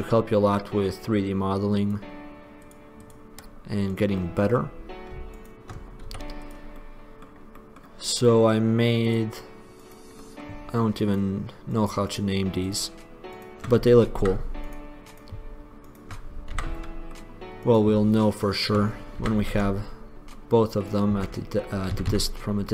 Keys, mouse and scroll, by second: 1.7-2.7 middle drag, 4.1-5.5 middle drag, 6.3 x, 7.3 middle click, 9.2 middle click, 10.4 middle click, 14.4 f, 16.7 f, 19.3 f, 19.7 Tab, 21.3 Tab, 22.1 a, 22.3 a.